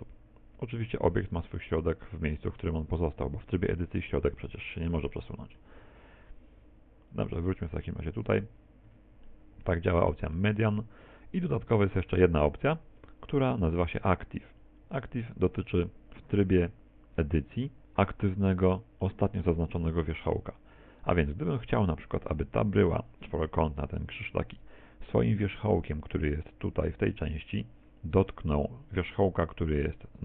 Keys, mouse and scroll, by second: 3.8 middle click, 5.0 shift+middle click, 5.4 shift+middle click, 7.1 click, 8.9 Tab, 9.3 middle click, 10.0 middle click, 11.6 click, 17.3 Tab, 19.1 middle click.